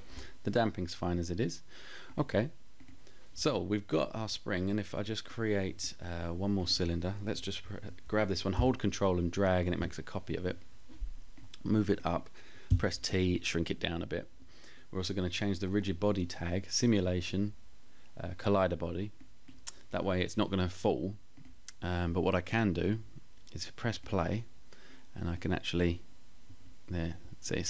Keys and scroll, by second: 11.8 t.